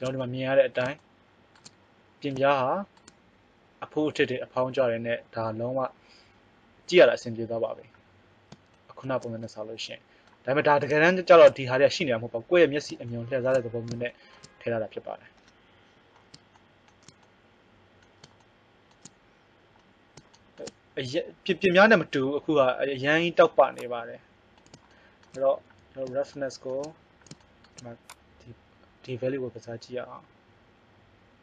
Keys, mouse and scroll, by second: 23.8-30.1 drag.